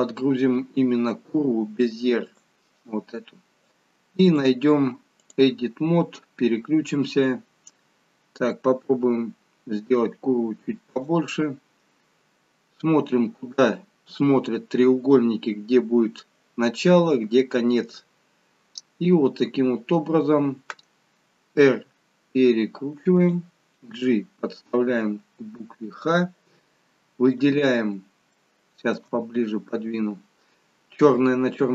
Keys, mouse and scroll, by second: 4.2 click, 6.1 scroll up 4, 8.8 s, 11.4 scroll down 3, 12.6-13.6 scroll up 12, 17.5-19.0 scroll down 4, 19.0-20.1 scroll down 7, 21.6 r, 23.8 g, 27.3 click, 28.2 shift+middle click, 29.1-29.6 scroll up 4.